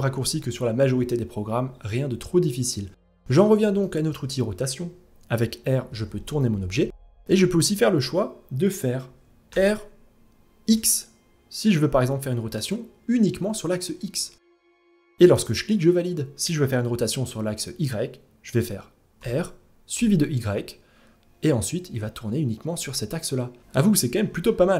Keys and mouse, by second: 0.4 ctrl+z, 2.0-2.7 middle drag, 3.4-3.7 shift+middle drag, 5.3 r, 9.0 r, 18.7 r, 23.5 ctrl+z, 24.4-24.7 middle drag.